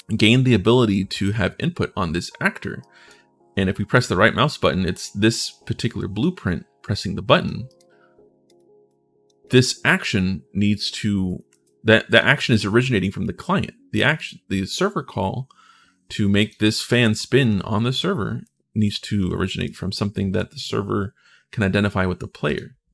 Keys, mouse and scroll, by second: 2.6 right click, 6.7 click, 7.4 right click, 8.2 click, 8.7 click, 9.2 click, 11.1 click, 11.3 ctrl+shift+s, 11.9 click, 13.9 click, 16.7-20.1 right drag, 16.8-19.9 typing, 22.2 click.